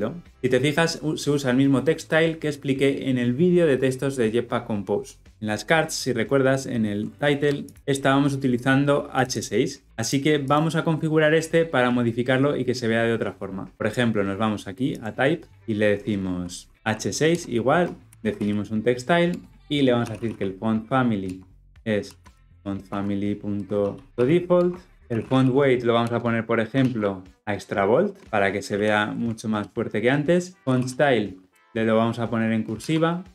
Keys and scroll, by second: 7.7 ctrl+b, 17.3 Return, 24.9 ctrl+alt+Left, 25.9 Return, 29.4 Return.